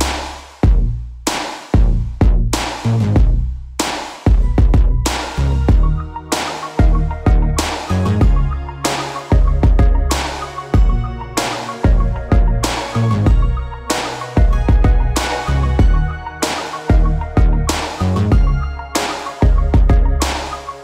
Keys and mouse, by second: 0.7 ctrl+r, 2.4 2, 2.5-10.2 alt+shift+middle drag, 3.6 v, 5.7 3, 6.0 l, 6.3 g, 7.0 p, 7.5 Tab, 8.7 ctrl+Tab, 10.2 click, 11.1 middle click, 11.2-12.3 drag, 12.1 f, 12.3 middle click, 12.9-20.8 drag.